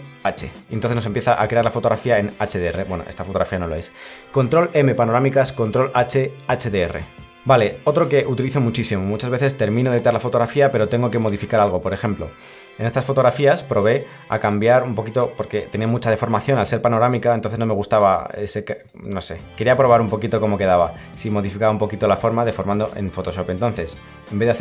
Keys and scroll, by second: 0.1 ctrl+h, 13.1 Right, 13.8 Right, 16.4 Left, 16.5 Right, 17.3 Left, 18.7 Right, 20.0 Left.